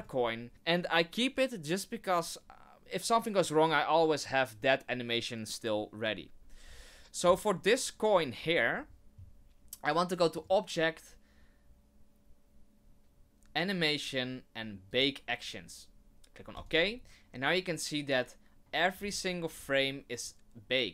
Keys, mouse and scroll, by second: 10.3 click, 18.9 scroll up 3, 19.5 scroll down 2, 20.2 click.